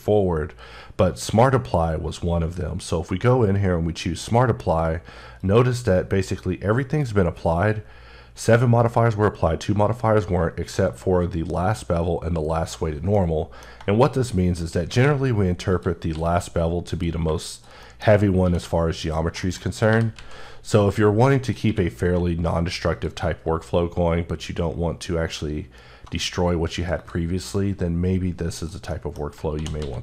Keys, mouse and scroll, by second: 5.1 click, 13.0 middle click, 14.4 shift+right click, 14.7 shift+a, 15.5 click, 15.9 s, 16.7 click, 17.8-18.2 scroll down 1, 18.2 q, 18.8 click, 19.2 shift+middle click, 19.3 shift+scroll up 2, 19.7 g, 20.0 z, 20.6 click, 21.2 click, 21.4 q, 22.7 click, 23.1 alt+scroll down 2, 24.3 scroll down 6, 25.9 scroll down 1, 26.8 click, 27.6-28.4 scroll down 1, 28.4 click, 28.7 middle click, 29.3-30.0 typing.